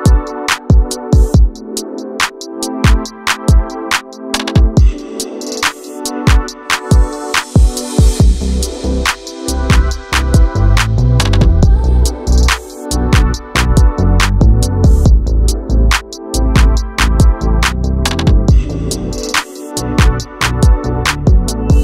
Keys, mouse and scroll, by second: 1.2 click, 2.0-4.7 drag, 6.7 click, 11.7-12.0 scroll down 2, 12.0 shift+middle click, 12.9 click, 13.6-15.1 drag, 15.1 0, 16.5 middle click, 17.0 shift+e, 17.4 shift+d, 18.3 click, 19.7-20.1 scroll up 2, 20.1 shift+middle click, 20.4-21.4 scroll up 2, 21.4 click.